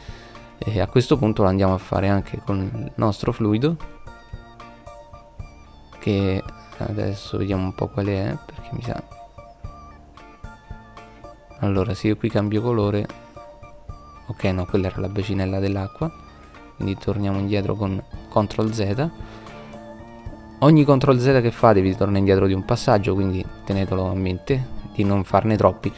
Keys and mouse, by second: 0.5 right click, 3.3 right click, 11.9 middle click, 14.3 ctrl+z, 16.0 ctrl+z, 18.8-20.0 drag, 20.5-20.9 drag.